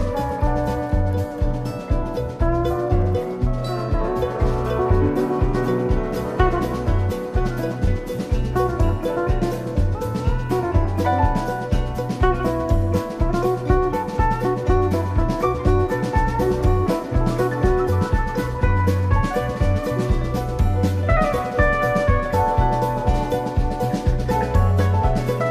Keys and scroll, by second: 4.7 i, 14.3 super+c, 14.7 super+f, 15.2 shift+Up, 20.6 super+].